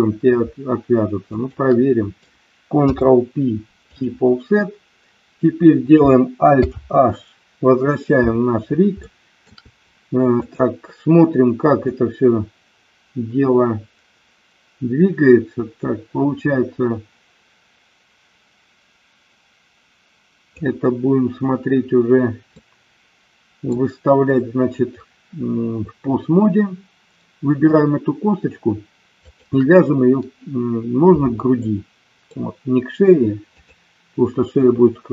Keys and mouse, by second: 1.2 shift+click, 2.8 ctrl+p, 6.5 alt+h, 9.2 shift+middle click, 10.4 click, 11.8-20.4 drag, 22.5-23.7 middle drag, 29.0 shift+click, 31.7 middle click.